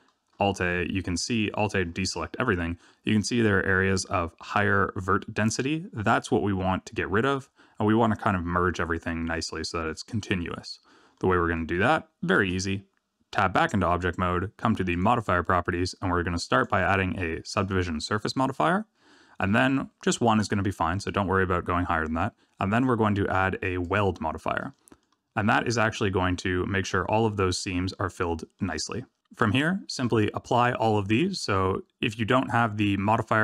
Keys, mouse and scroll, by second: 2.0 alt+a, 11.1 middle click, 11.7 scroll down 3, 12.3 Tab, 15.4 click, 16.4 click, 22.6 click, 24.6 middle click, 25.2-25.6 scroll up 3, 25.6 shift+middle click, 26.1-27.7 scroll up 2, 27.9 middle click, 28.9 scroll down 2.